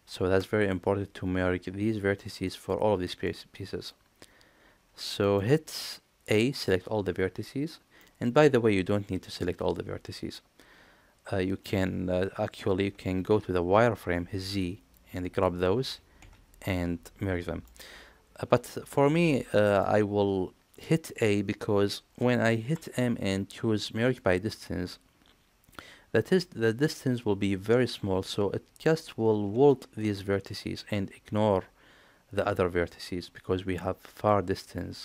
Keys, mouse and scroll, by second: 1.3-2.1 scroll down 1, 2.1-2.4 scroll down 1, 2.4 middle click, 3.3 middle click, 5.2 middle click, 6.3 a, 8.0-11.6 middle drag, 11.8 alt+z, 13.0 alt+z, 14.3 z, 15.0 click, 16.2 z, 16.7-17.7 middle drag, 18.9 a, 19.8 shift+middle click, 22.7 m, 28.8 middle click.